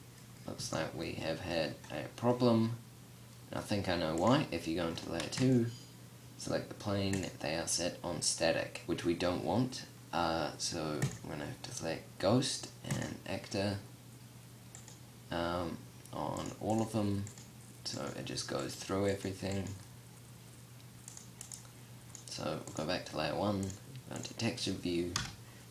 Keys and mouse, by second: 3.6-4.7 drag, 5.6-8.2 drag, 24.5 KP_0.